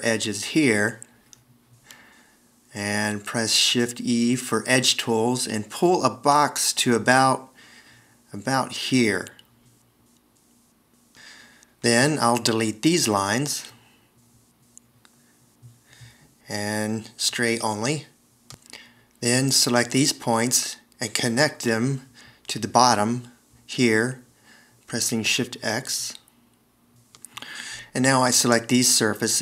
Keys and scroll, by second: 7.7 shift+e, 18.1 BackSpace, 20.9 a, 24.6 shift+x, 26.0 space, 29.0 shift+x.